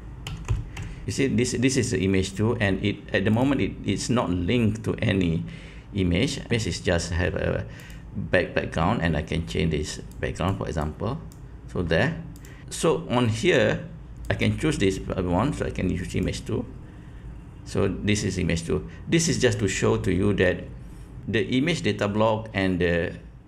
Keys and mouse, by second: 3.4 click, 7.7 click, 12.3 click, 14.2-16.3 drag.